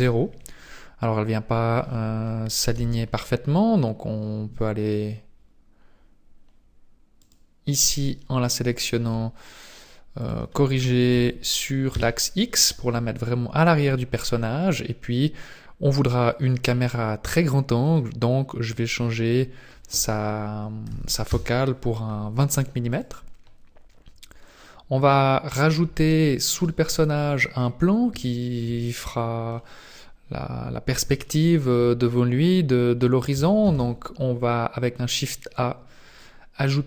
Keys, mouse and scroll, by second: 2.7 n, 4.1-4.5 scroll up 4, 7.2 right click, 10.2 click, 16.0 click, 17.8 click, 22.9 right click, 24.6 middle click, 25.7-26.1 scroll down 1, 26.3 shift+middle click, 27.2 middle click, 28.2 shift+middle click, 28.9 middle click, 31.3 shift+middle click, 33.6 shift+a.